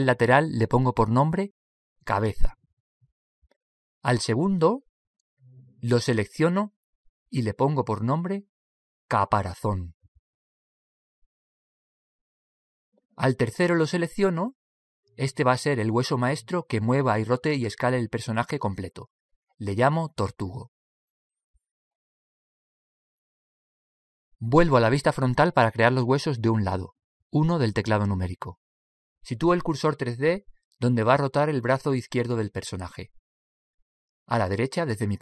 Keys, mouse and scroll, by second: 0.8-3.4 drag, 6.5-11.6 right drag, 14.2-22.9 right drag, 26.5 KP_1, 34.6 click.